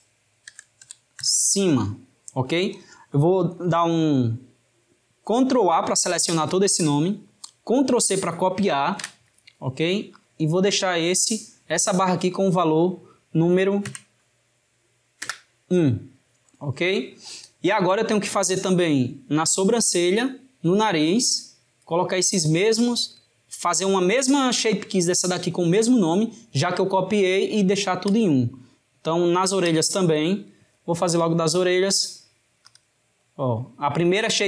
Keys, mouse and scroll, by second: 12.7-15.8 drag, 28.1 click, 29.7 click, 32.0-33.1 drag, 33.1-34.4 middle drag.